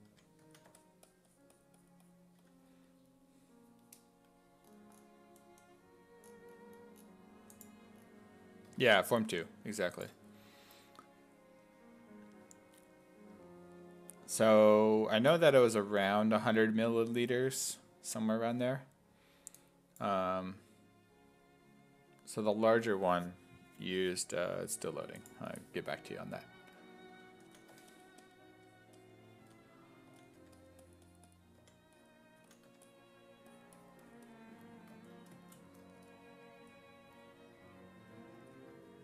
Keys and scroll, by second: 0.0-1.2 typing, 2.4 s, 8.8 alt+Tab, 26.6 s, 27.4 s, 27.7 1, 29.4 s, 30.1 s, 30.4 1, 31.6 4, 32.4 s, 32.7 1, 36.0 s, 38.4 s.